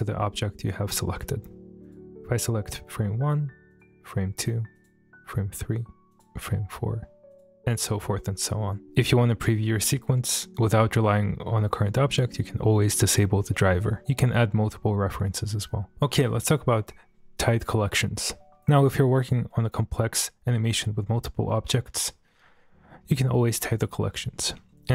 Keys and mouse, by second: 1.8 click, 3.7 click, 4.8 click, 6.1 click, 7.3 click.